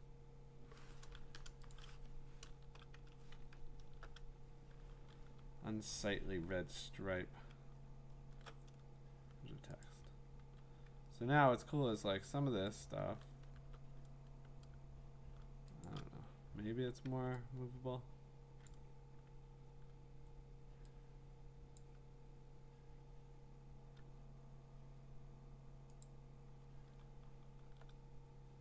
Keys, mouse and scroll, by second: 1.7 click, 2.5 BackSpace, 3.3 Escape, 3.8 alt+BackSpace, 5.0 ctrl+d, 5.4-8.2 scroll, 9.8 click, 10.4 v, 12.8 click, 13.6 b, 15.9 shift+click, 17.0 v, 18.7 click, 19.9-24.8 drag, 26.0 click, 27.0-27.6 scroll, 28.5 middle click.